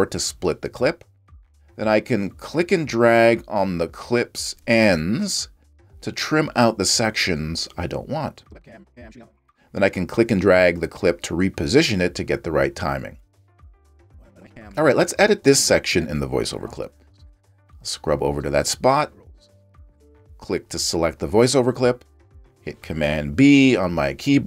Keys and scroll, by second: 14.4 space.